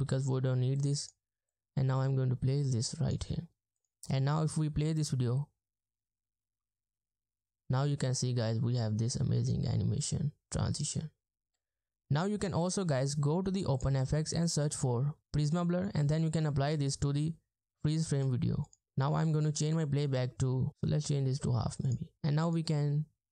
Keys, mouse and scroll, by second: 0.1 BackSpace, 4.1 space, 11.4 space, 14.9-15.7 typing.